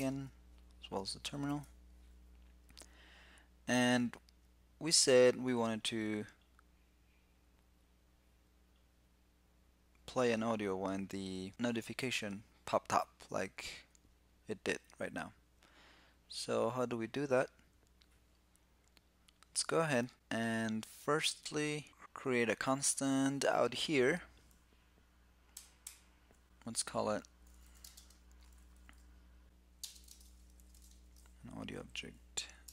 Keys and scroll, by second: 1.2 ctrl+<, 30.3 alt+c.